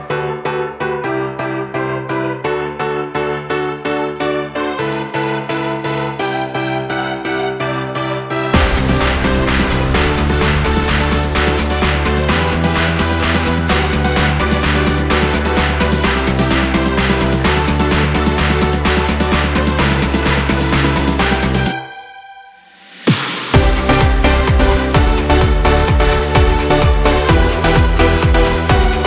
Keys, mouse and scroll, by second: 0.1 shift+click, 0.6 x, 1.7 scroll down 2, 1.9-3.0 middle drag, 3.0 scroll up 1, 4.4 click, 5.3 g, 8.0 click, 8.3 middle click, 8.9 scroll up 1, 9.2 middle click, 10.1 alt+shift+click, 12.3-13.5 drag, 14.1-15.1 middle drag, 15.1 shift+click, 15.9 click, 16.8 shift+click, 17.3 shift+click, 18.3 shift+click, 19.2 f, 19.6 click, 20.6 alt+shift+click, 21.4 f, 21.8 click, 22.6 ctrl+s, 23.1-23.5 scroll down 2, 23.5-23.8 scroll up 2, 23.8-26.9 middle drag, 27.6 click, 28.7-29.0 drag.